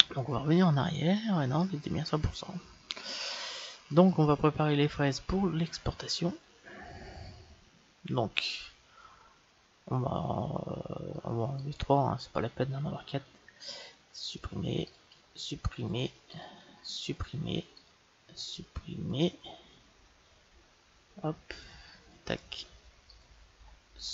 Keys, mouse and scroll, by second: 0.0-2.4 drag, 3.6-7.6 middle drag, 10.0-11.7 middle drag, 11.6-13.3 right drag, 13.4 Delete, 14.8-17.1 right drag, 14.9 Delete, 16.3 Delete, 18.0 Delete, 18.0-19.4 right drag, 19.5-21.5 middle drag, 21.8-23.7 drag, 22.8-24.1 right drag, 23.3 Delete.